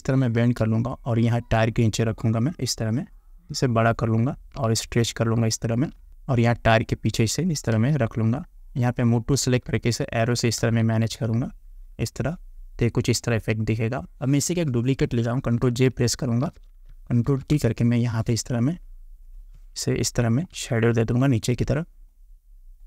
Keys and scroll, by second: 7.8 Return, 9.8 Up, 16.5 ctrl+j, 17.3 ctrl+t.